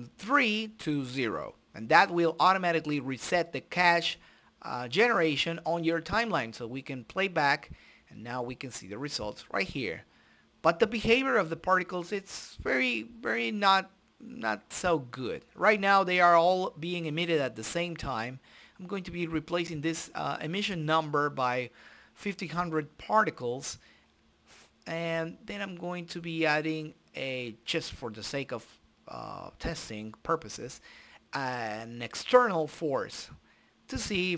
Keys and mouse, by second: 0.5-1.9 drag, 0.7 right click, 1.5 right click, 2.5 right click, 3.9 click, 4.9 middle click, 5.3 right click, 5.8-7.5 drag, 7.4 right click, 10.6 middle click, 14.1 click, 15.9-17.3 drag, 17.0 KP_0, 18.0 click, 18.1 shift+a, 27.9 s, 28.8 i, 30.8 right click, 31.0 click, 32.0-34.0 drag, 34.0 i.